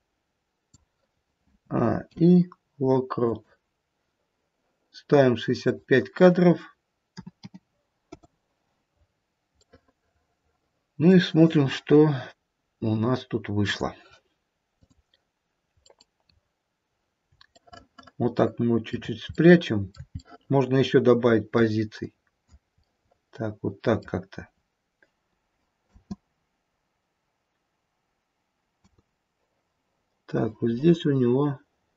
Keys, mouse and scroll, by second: 1.6 a, 2.1 i, 5.6 click, 8.8-9.6 scroll down 4, 9.6 middle click, 13.7 click, 14.9 click, 15.8-16.5 scroll up 2, 17.6 shift+middle click, 18.8 shift+middle click, 19.4 middle click, 20.2 shift+middle click, 21.5 shift+middle click, 22.0 click, 22.8 middle click, 25.7 space, 28.8 space, 30.3 click.